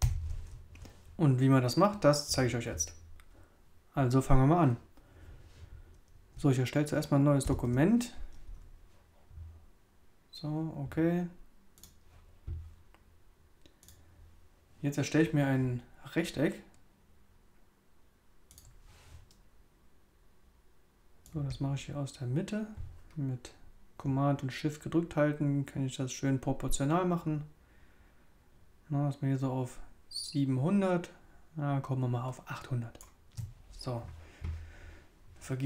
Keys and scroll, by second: 0.0 super+0, 7.4 super+n.